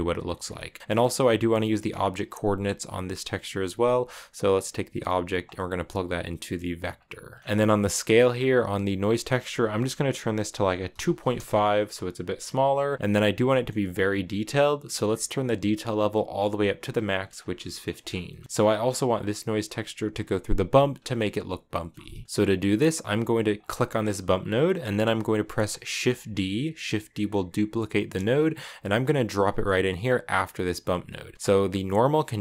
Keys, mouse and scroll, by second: 0.3 shift+middle click, 0.9-2.0 drag, 2.0-2.9 scroll up 2, 2.9-4.8 scroll up 1, 4.8-7.1 drag, 7.1 middle click, 7.4-7.9 scroll up 2, 8.8-11.9 drag, 13.2-15.7 shift+middle drag, 15.7-17.1 drag, 17.1 scroll down 2, 17.5 shift+middle click, 17.8 scroll up 1, 17.8-18.4 scroll down 4, 18.0 middle click, 18.4-20.5 middle drag, 20.5 click, 21.5 scroll up 1, 21.7 middle click, 22.2-22.9 scroll up 1, 22.9-23.3 scroll up 1, 23.3-24.4 drag, 24.4 scroll down 3, 24.6-25.8 middle drag, 25.8 shift+d, 30.6-32.4 drag.